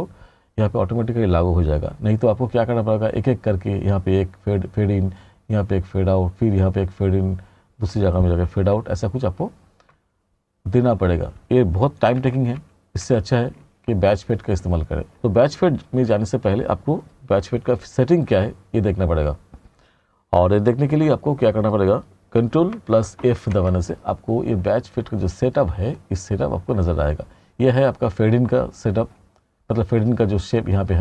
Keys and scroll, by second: 12.3 r, 23.2 ctrl+f.